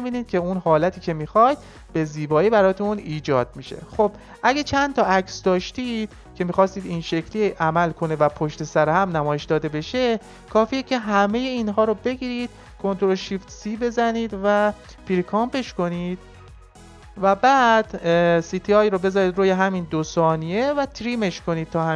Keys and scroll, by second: 12.8 ctrl+shift+c.